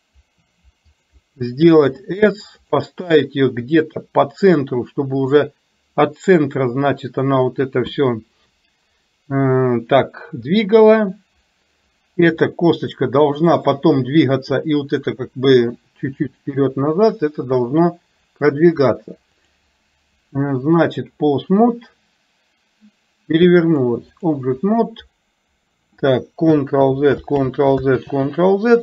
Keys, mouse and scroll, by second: 4.1-5.4 drag, 12.4 click, 19.4-21.2 drag, 23.8 click, 27.4 ctrl+z.